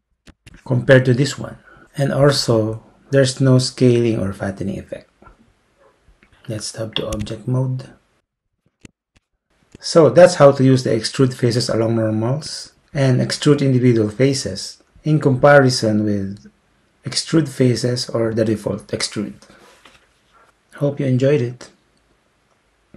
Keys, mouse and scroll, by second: 7.1 Tab.